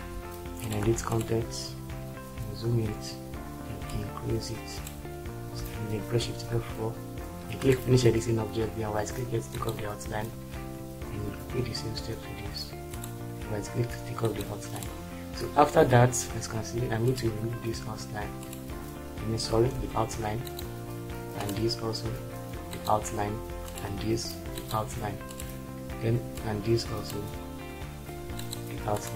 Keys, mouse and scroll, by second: 6.3 shift+F4, 11.2 Tab, 19.8 ctrl+z.